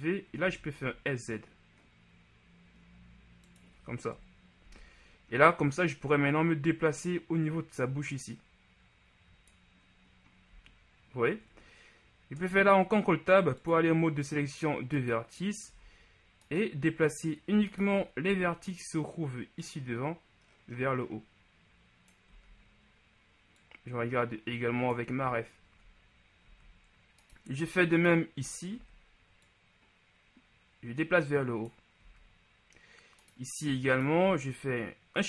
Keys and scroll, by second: 0.6 s, 0.9 z, 4.2 KP_1, 4.7 z, 10.6 z, 12.4 ctrl+Tab, 15.9 z, 18.3 shift+z, 22.4 z, 26.5 ctrl+z, 28.8 shift+z, 32.1 z.